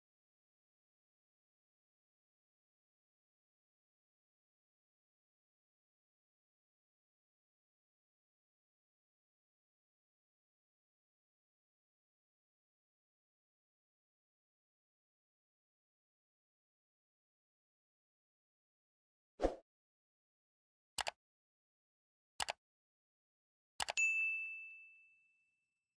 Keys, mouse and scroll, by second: 3.4 click, 4.0 alt+scroll up 1, 4.7 space, 4.8 click, 5.2 space, 5.3 click, 5.4 space, 9.7-15.9 drag, 15.9 x, 16.8-19.5 drag, 19.5 ctrl+z, 20.8-24.8 drag, 24.8 space, 24.9-25.9 drag.